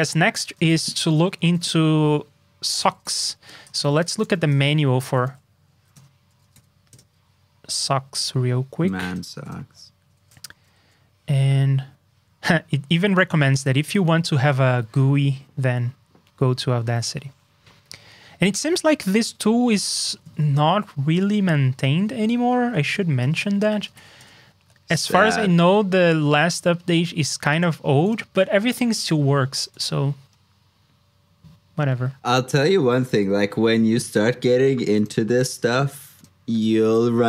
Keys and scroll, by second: 0.6 shift+super+Tab, 1.0 super+j, 10.5 ctrl+d, 20.5 super+Tab, 23.1 super+t.